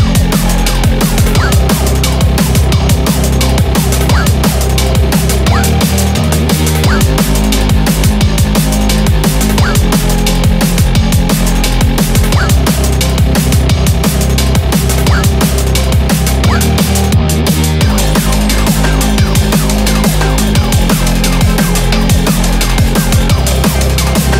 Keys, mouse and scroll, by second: 8.3 1, 10.6 click, 12.2 click, 12.9 g, 15.0 click, 15.0 g, 15.1 g, 19.2 click, 19.4 shift+click, 20.0 shift+click, 20.4 shift+click, 20.8 shift+click, 21.1 shift+click, 21.7 shift+click, 22.8 g.